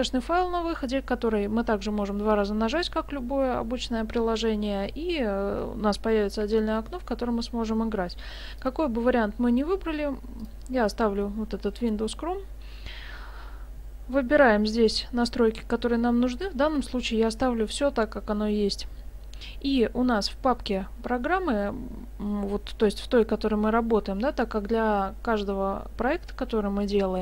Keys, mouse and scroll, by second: 8.6 click, 14.7-16.2 scroll down 2.